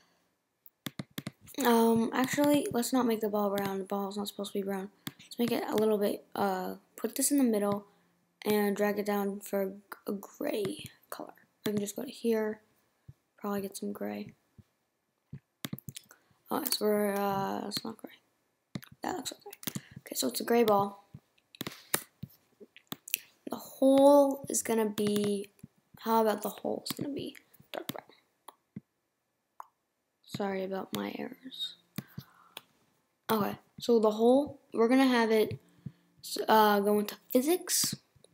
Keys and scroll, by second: 21.9 BackSpace.